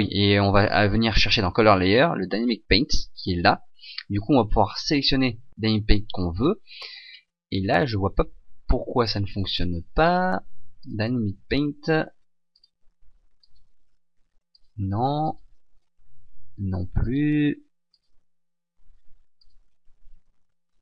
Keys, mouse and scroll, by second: 5.2 click, 7.1-7.6 scroll down 1, 7.6-8.4 scroll up 1, 8.4 ctrl+z, 11.0 click, 13.7 click, 15.4 click, 18.1 click, 19.6 click.